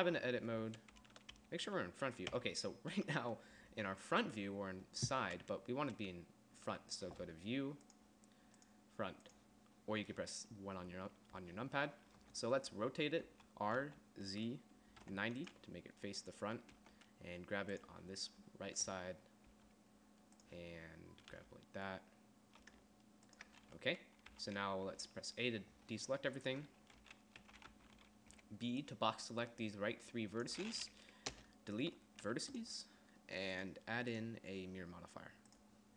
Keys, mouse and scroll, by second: 1.6 KP_1, 2.5 KP_3, 13.5 r, 16.7 right click, 17.3 g, 19.7 g, 21.5 g, 24.5 a, 27.6 n, 28.0 t, 28.5 b, 31.5 Delete.